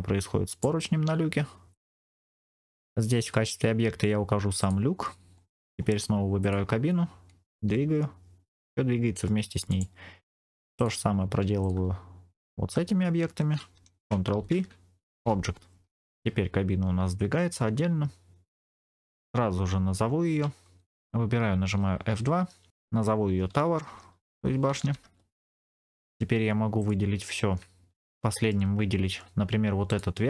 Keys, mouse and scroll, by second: 0.4-1.7 drag, 0.4 right click, 2.3 click, 2.6 click, 5.3 scroll up 2, 5.5 click, 5.7-6.3 scroll down 2, 6.3 click, 7.6 g, 9.6-10.7 right drag, 10.7 click, 11.5 shift+click, 12.3 shift+click, 14.2 ctrl+p, 15.9 click, 15.9 scroll down 2, 16.0 g, 20.0-20.8 scroll up 2, 21.5 F2, 24.7 BackSpace, 26.7 click, 28.0 shift+click, 28.1 shift+middle click, 29.8 shift+click.